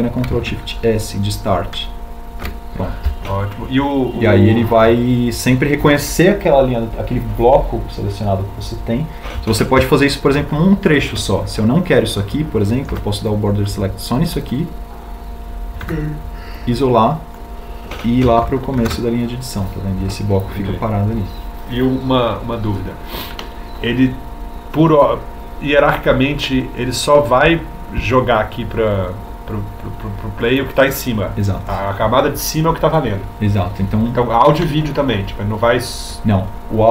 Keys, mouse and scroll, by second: 3.9 ctrl+alt+shift+s, 12.5 ctrl+alt+shift+c, 15.0 b, 17.6 b, 21.2 ctrl+alt+shift+s.